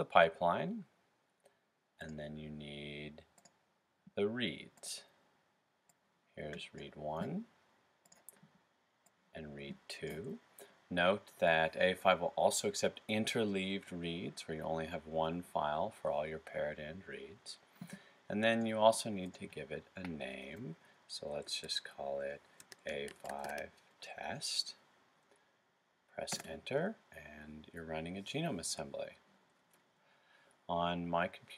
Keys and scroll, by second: 21.1 typing, 22.4-23.3 typing.